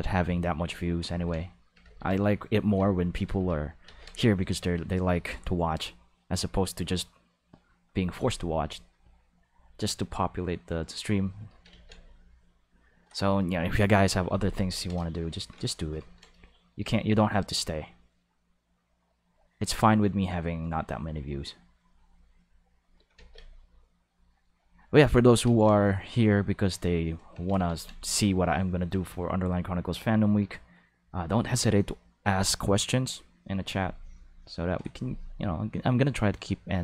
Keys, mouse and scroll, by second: 1.1 ctrl+z, 1.8 ctrl+z, 2.7 ctrl+z, 3.2 ctrl+z, 3.8 ctrl+z, 4.5 click, 5.8 click, 6.8 click, 8.9 click, 10.1 click, 10.9 click, 11.7 ctrl+z, 12.2 click, 17.3 click, 18.6 click, 20.9 click, 21.9 click, 23.1 ctrl+z, 24.0 click, 25.4 ctrl+z, 26.0 click, 27.4 ctrl+z, 27.6 ctrl+z, 29.5 click, 30.9 click, 33.6 click, 34.3 click, 34.6 click, 35.5 click, 36.2 click.